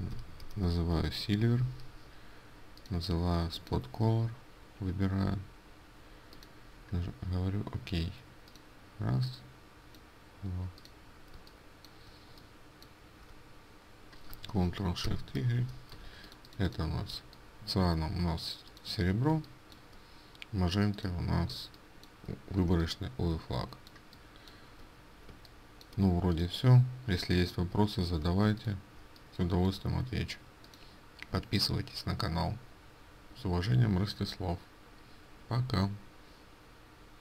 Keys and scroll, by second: 16.0 ctrl+space, 22.7 ctrl+space.